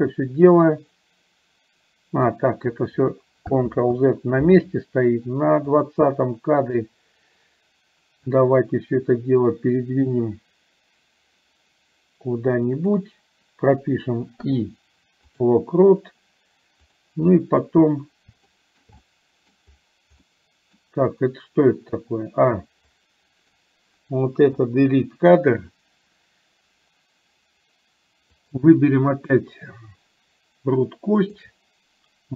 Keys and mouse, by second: 3.9 ctrl+z, 6.1 click, 8.6-13.1 drag, 17.1 click, 18.7 shift+middle click, 19.1 middle click, 20.3 middle click, 23.1 click, 24.8 Delete, 28.3 click.